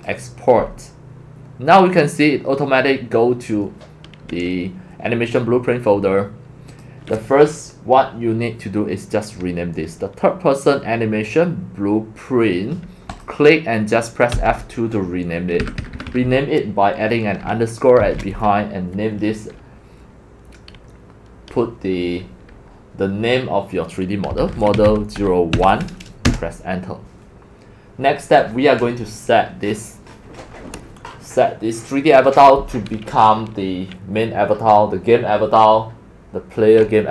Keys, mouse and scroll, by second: 3.9-5.3 drag, 6.7 click, 13.1 click, 14.3 F2, 15.6 Right, 15.8 Right, 15.9 Right, 16.1 Right, 16.2 Right, 24.0-26.3 typing, 31.3 typing.